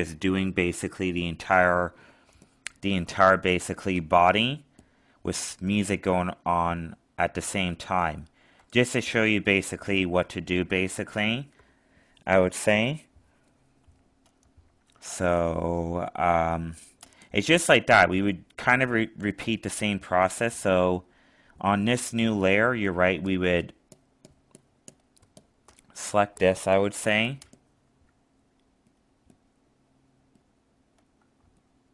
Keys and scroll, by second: 6.6 alt+space, 31.4 alt+space.